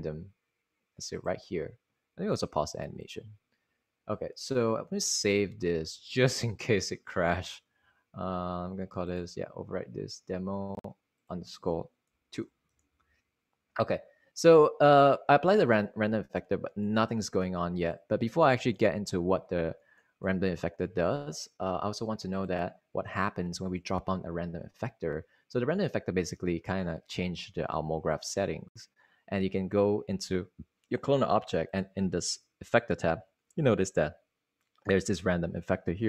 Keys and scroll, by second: 5.5 super+s, 12.9-13.6 typing.